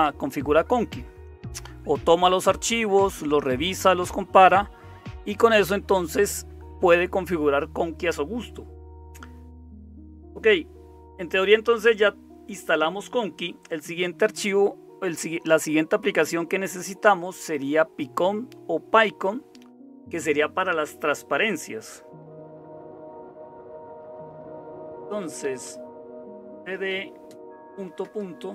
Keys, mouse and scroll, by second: 0.0-28.5 typing, 22.8 ctrl+x, 28.0 Return.